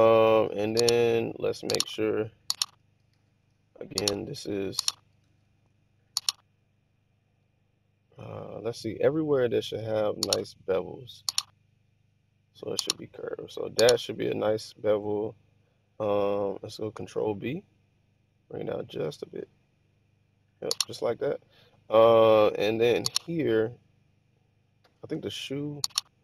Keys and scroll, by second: 3.1 super+z, 5.2 super+z, 17.0 ctrl+b.